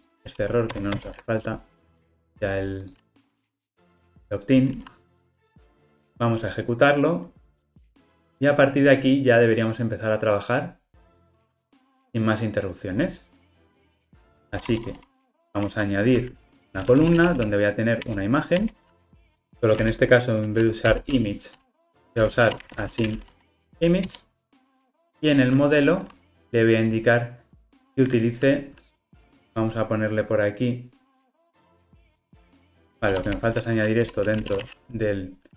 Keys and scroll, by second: 0.7 super+BackSpace, 3.8 super+BackSpace, 14.6 Tab, 18.1 Return, 21.8 alt+shift+Left, 24.2 Return.